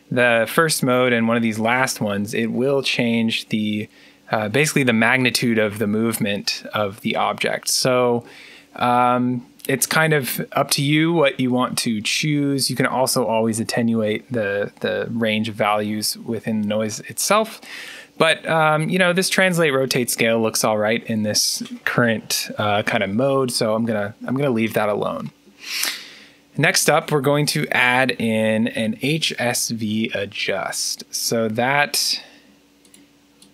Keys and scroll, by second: 28.2-30.8 typing.